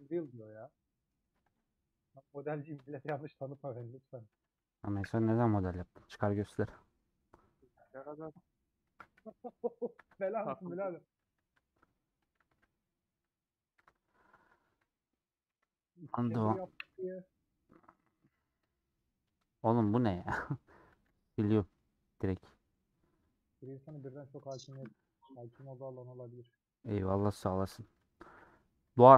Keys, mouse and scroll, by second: 0.0 alt+click, 0.5 middle click, 1.2 2, 2.8 shift+middle click, 3.7 ctrl+click, 4.4 a, 5.7 middle click, 6.6 Tab, 6.6-8.4 middle drag, 8.4 Tab, 8.9 Tab, 9.4 /, 10.1 scroll down 1, 10.3 h, 11.3 scroll up 2, 12.3 alt+click, 15.4 KP_Decimal, 16.0-16.5 scroll down 7, 16.5-18.1 middle drag, 18.1 2, 19.3 scroll down 2, 19.8 Tab, 20.0 scroll down 1, 20.3 scroll up 1, 21.1 x, 21.3 scroll down 2, 21.9 scroll up 1, 22.1-23.6 drag, 24.1 scroll down 2, 24.4 scroll up 1, 24.4 scroll down 1, 27.1 middle click, 27.8 click, 28.4-29.1 middle drag.